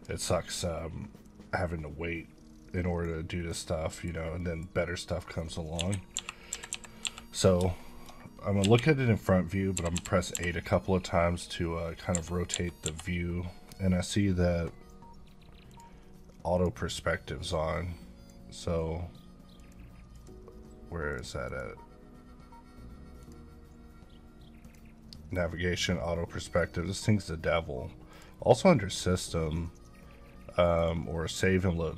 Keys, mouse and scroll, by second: 1.2-3.1 drag, 3.8 middle click, 4.1 scroll down 2, 4.4 middle click, 4.7 scroll up 1, 5.1 middle click, 5.8 KP_1, 7.0 KP_5, 7.8 shift+middle click, 8.1 scroll up 1, 9.9 KP_8, 10.3 KP_8, 15.7 click.